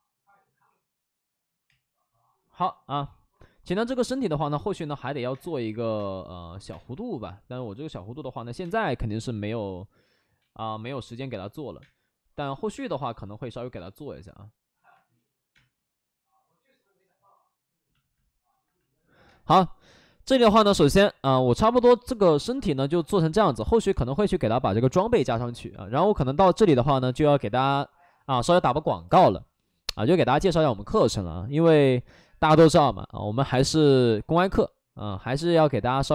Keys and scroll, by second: 0.5 w, 1.6 2, 2.9 2, 5.2-7.1 typing, 8.2 3, 8.5 space, 9.2 space, 11.7 ctrl+z, 11.7 space, 12.4 ctrl+z, 12.7 space, 14.8 space, 15.4 space, 19.2 space.